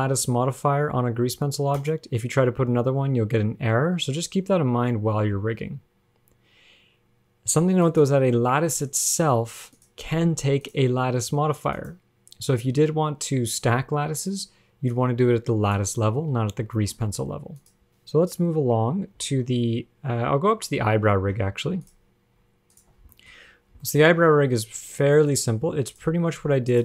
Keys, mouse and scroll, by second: 0.1 click, 8.1 click, 10.0 click, 10.9 click, 15.1 click, 17.0 shift+middle click, 17.8 click, 17.9 ctrl+Tab, 17.9 click, 19.4 alt+r, 19.5 alt+g, 20.9 ctrl+Tab, 22.0 click, 23.0 shift+click, 23.3 shift+middle click, 23.5-24.3 scroll up 7, 24.0 shift+middle click, 25.0 click.